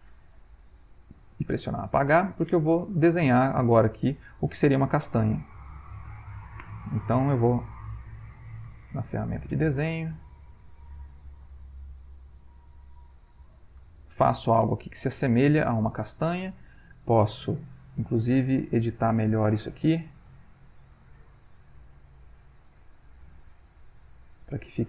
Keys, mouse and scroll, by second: 0.6 Delete, 2.7 click, 5.2 click, 5.8-6.8 drag, 7.2-8.9 drag, 9.7-11.0 drag, 13.6 click, 15.7-16.8 ctrl+middle drag, 15.7-16.3 ctrl+scroll up 1, 16.3-16.8 ctrl+scroll up 1, 19.0 click, 19.9 click, 20.7 click, 21.4 click, 22.5-24.2 drag, 24.7 click.